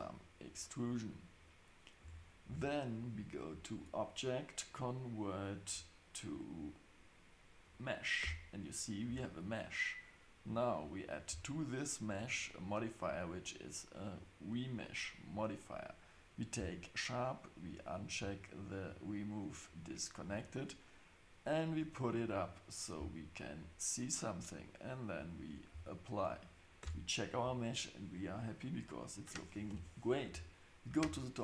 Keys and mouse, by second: 0.0 click, 0.8 click, 2.0 Tab, 2.5 Tab, 3.8-8.2 drag, 8.2 Tab, 9.0 Tab, 12.1-14.8 drag, 16.3 click, 17.8 click, 19.8 click, 21.8 click, 23.0 click, 25.4-26.2 drag, 26.8 Tab, 29.7 KP_7.